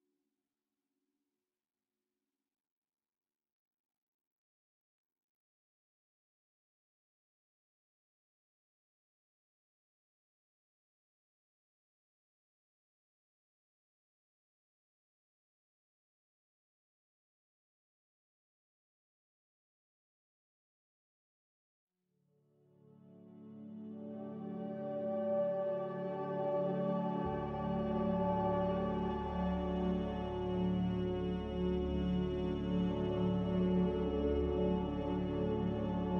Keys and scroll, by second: 8.2 a, 11.2 z, 14.6 Delete, 20.9 a, 22.8 Escape.